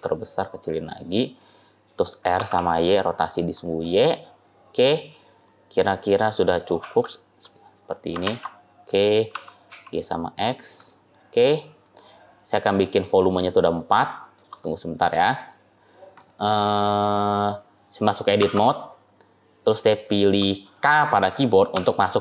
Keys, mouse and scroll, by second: 1.3 middle click, 2.2 r, 3.8 middle click, 5.3 middle click, 6.7 shift+d, 8.1 ctrl+z, 9.2 g, 10.6 click, 11.0-11.5 scroll down 3, 11.5-12.1 scroll up 2, 12.1-12.8 scroll up 3, 12.8 click, 12.8-13.5 scroll up 1, 13.5 scroll up 2, 13.6 scroll down 1, 13.9 shift+middle click, 14.5-15.2 scroll up 2, 15.2 click, 16.0 click, 18.3 Tab, 18.8-19.6 scroll up 4, 19.7 shift+middle click, 20.5 click, 21.7 k.